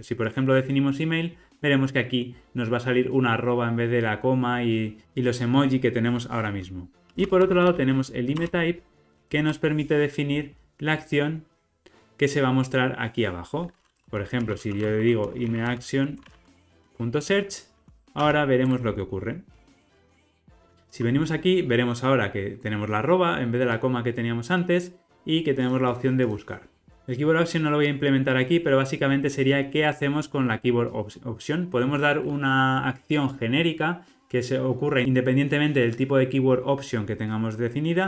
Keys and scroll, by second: 8.3 Return, 9.1 super+p, 16.9 Return, 19.5 ctrl+r, 26.9 super+b.